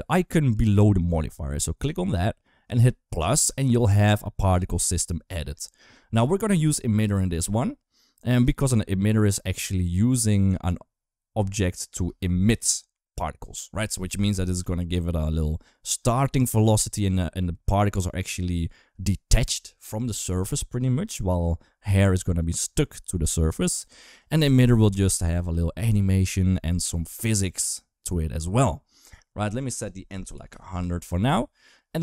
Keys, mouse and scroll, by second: 1.6 click, 3.3 click, 9.4 middle click, 10.0 space, 11.7 space, 16.4 space, 18.2 space, 21.8 click, 23.5 click, 24.8 space, 29.4 click, 30.3 0.